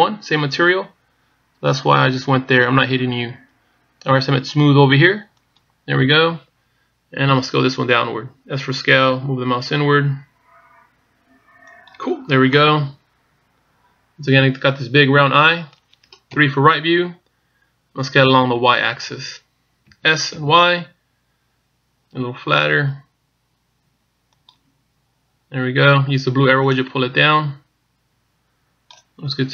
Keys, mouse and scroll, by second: 6.2 click, 8.3 s, 13.3 middle click, 17.2 KP_3, 20.7 s, 27.6 click.